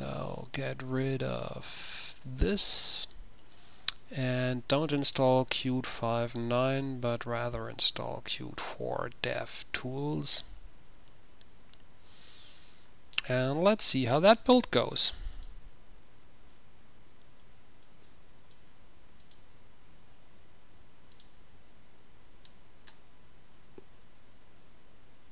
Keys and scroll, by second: 0.9 q, 2.4 typing, 7.0 ctrl+v.